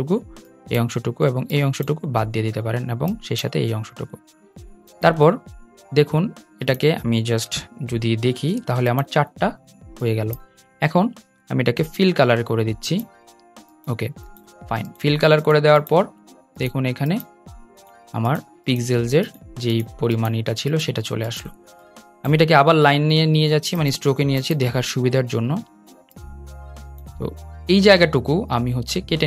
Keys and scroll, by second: 8.4 super+z.